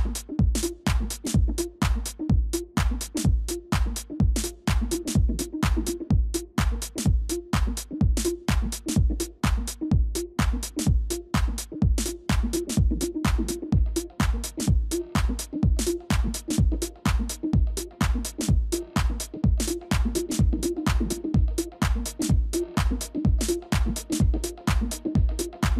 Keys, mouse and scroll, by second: 0.5 ctrl+[, 9.7 ctrl++, 10.3 space, 13.6 scroll down 1, 22.7 ctrl+z.